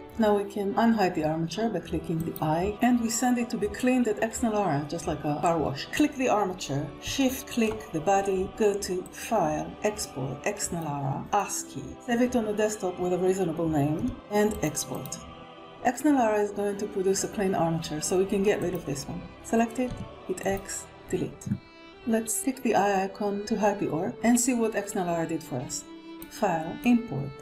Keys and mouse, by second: 2.0 click, 11.6 click, 18.8 click, 20.6 x.